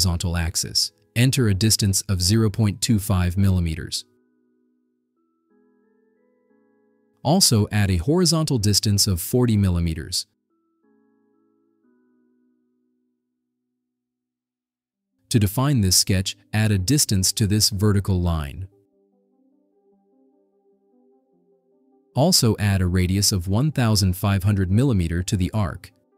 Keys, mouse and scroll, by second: 0.8 click, 2.1 0, 2.4 ,, 3.0 2, 3.3 5, 4.3 Return, 7.3 click, 7.6-8.1 scroll down 6, 9.6 click, 10.5 4, 10.9 0, 11.9 Return, 12.5 scroll down 2, 13.5 scroll up 2, 14.0-14.5 scroll up 4, 15.8-16.2 scroll down 4, 16.8 scroll up 2, 17.7 click, 18.2 click, 19.1 1, 19.6 0, 19.9 Return, 22.2 middle click, 22.2 scroll down 2, 24.5 click.